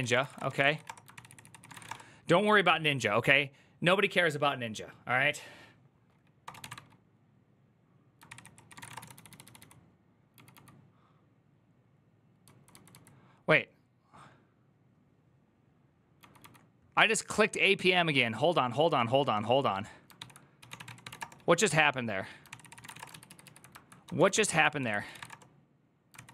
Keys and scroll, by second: 0.0-2.2 typing, 8.0 ctrl+c, 8.0-10.3 typing, 8.2 ctrl+c, 12.2-12.7 typing, 19.9 ctrl+f, 20.1-21.3 typing, 22.3 ctrl+c, 22.4 ctrl+c, 22.6 ctrl+:, 22.7 typing, 22.7 Return, 22.9 ctrl+u, 23.1 ctrl+u, 23.8-26.3 typing, 24.1 ctrl+c, 25.9 ctrl+c.